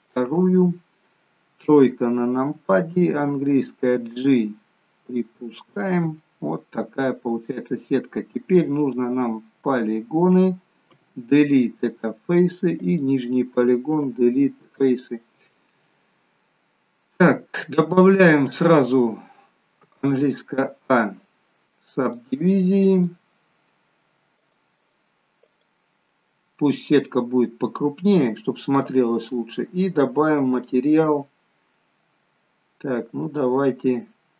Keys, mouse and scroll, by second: 0.0 shift+click, 0.6 shift+click, 1.6 KP_3, 3.2 g, 6.2 middle click, 8.9 click, 9.6 click, 11.0 Delete, 12.8 click, 16.4 middle click, 21.9 click, 30.6 click, 33.3 click.